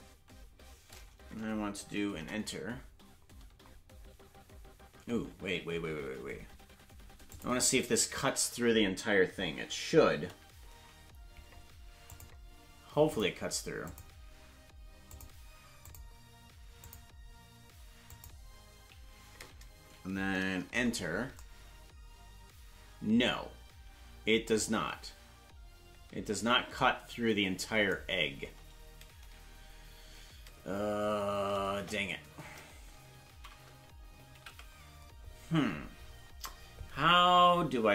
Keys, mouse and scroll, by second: 5.7 ctrl+z, 7.3 click, 12.1-21.1 drag, 29.9 Return, 30.0 Left, 31.7 KP_0, 33.3 ctrl+z, 35.0 ctrl+z.